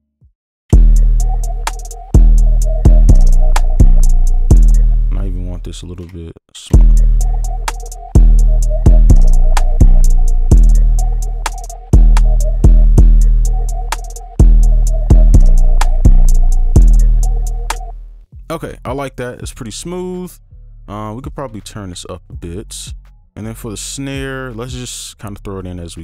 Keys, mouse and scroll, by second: 0.0 right click, 4.2 ctrl+click, 4.8 ctrl+space, 5.3 ctrl+shift+click, 6.1-6.7 scroll down 2, 6.7 alt+space, 12.9 space, 14.4 right click, 17.7 space, 21.2 right click, 21.4 ctrl+a, 21.8-23.7 alt+scroll up 1, 23.9 right click, 25.9 double click.